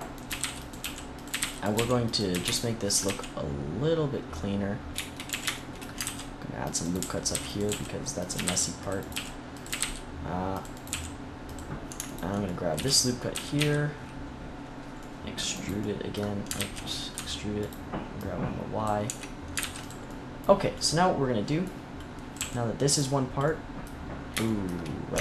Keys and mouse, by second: 0.2-2.9 typing, 2.5 click, 5.2 a, 5.9 ctrl+r, 6.8-8.1 drag, 6.9-9.7 typing, 10.8 g, 13.5 z, 16.5 ctrl+z, 17.0 e, 18.9 Tab, 19.5 ctrl+s, 22.3 g, 25.0 Tab.